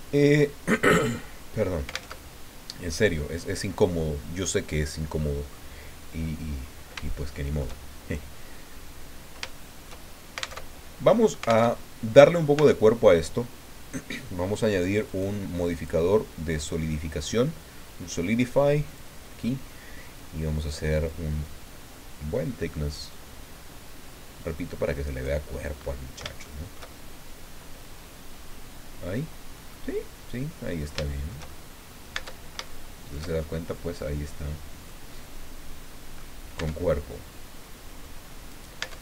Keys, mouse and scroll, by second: 2.1 alt+Tab, 6.5 scroll up 2, 7.1 shift+middle click, 9.5 shift+middle click, 10.6 alt+Tab, 11.7 alt+Tab, 12.5 Tab, 15.1 click, 15.7 click, 18.9 click, 21.0-25.4 drag, 25.5 middle click, 25.7 scroll up 1, 26.4-31.0 shift+middle drag, 31.9 middle click, 32.1 Tab, 32.6 shift+click, 33.4 shift+click, 33.7 scroll up 2, 35.1-36.3 drag, 36.5 Tab, 37.1-38.2 drag, 38.5 right click, 38.8 Tab.